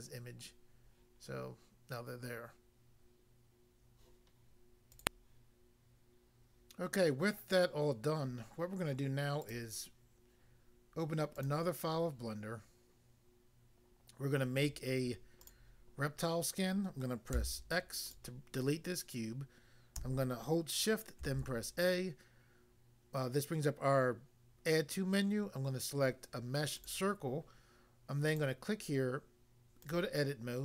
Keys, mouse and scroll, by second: 4.9 click, 5.0 click, 9.4 click, 9.5 click, 11.5 click, 15.4 click, 15.5 click, 17.3 x, 18.0 click, 18.1 click, 21.3 a, 26.7 click, 26.9 click, 28.3 click, 29.8 click, 29.9 click.